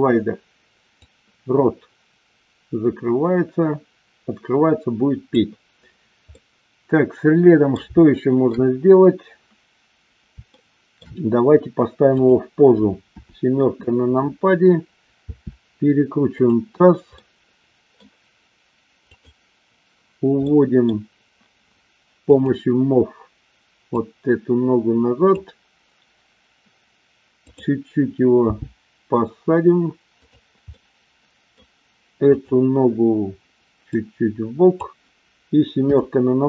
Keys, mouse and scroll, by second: 1.1-5.3 drag, 6.2-7.6 middle drag, 8.0 shift+middle click, 10.6 shift+middle click, 12.1 click, 13.1 KP_7, 15.3 r, 16.4 click, 17.2-18.0 middle drag, 19.0 click, 20.5 middle click, 22.2 click, 23.9 click, 27.5 click, 28.5 g, 30.2 click, 30.7-31.5 middle drag, 32.4 click, 34.0 click, 35.9 KP_7.